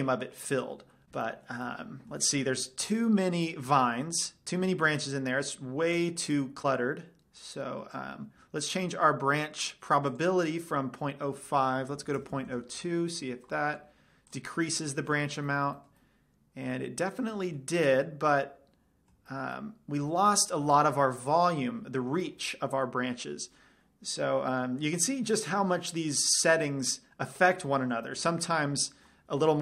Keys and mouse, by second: 5.1 middle drag, 5.5 middle click, 6.3 middle drag, 6.5 middle drag, 7.8-9.5 drag, 10.4-12.0 drag, 14.7-16.2 middle drag, 20.3-24.0 middle drag, 24.8 middle drag, 26.6-28.3 drag, 28.7-29.6 middle drag.